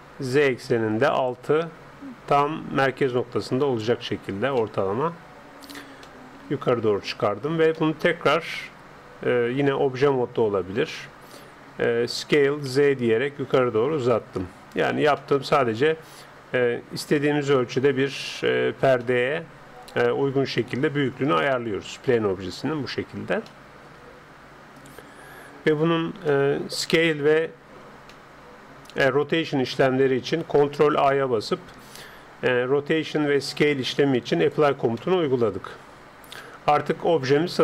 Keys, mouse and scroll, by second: 0.4-2.4 drag, 4.6-9.5 middle drag, 9.9 Tab, 10.4-13.4 middle drag, 12.2 s, 13.4-14.2 scroll down 1, 15.2-16.8 middle drag, 17.2-20.8 middle drag, 23.5-25.2 middle drag, 26.3-30.9 middle drag, 30.9 ctrl+a, 35.0-37.6 middle drag.